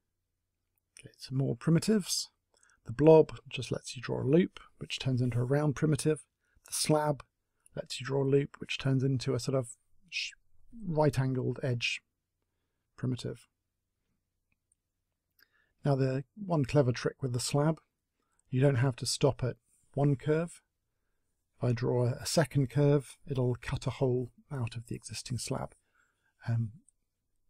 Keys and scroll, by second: 4.2 space, 8.0 s, 14.1 space, 26.1 space.